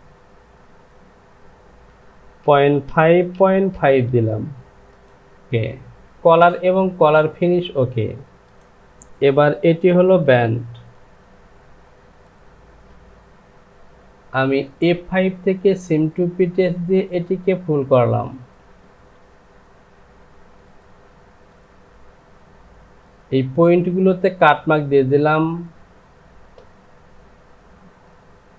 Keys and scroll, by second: 2.4 KP_Decimal, 2.8 KP_Decimal, 3.1 KP_5, 3.3 Down, 5.5 shift+z, 10.2 Home.